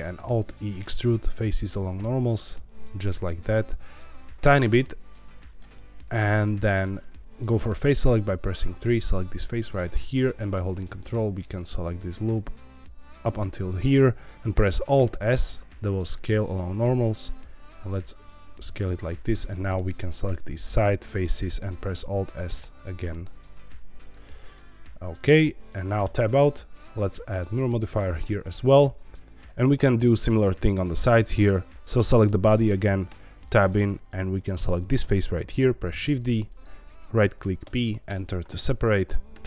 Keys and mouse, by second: 0.1 alt+e, 5.4 shift+click, 8.0 3, 8.7 click, 9.3 middle click, 11.4 ctrl+click, 14.3 Escape, 14.9 alt+s, 18.6 shift+click, 19.2 click, 19.5 middle click, 21.0 middle click, 21.6 alt+s, 24.0 click, 24.2 middle click, 26.0 Tab, 26.8-27.9 drag, 32.5 middle click, 33.0 Tab, 33.7 3, 35.8 shift+d, 37.6 p, 39.3 Tab.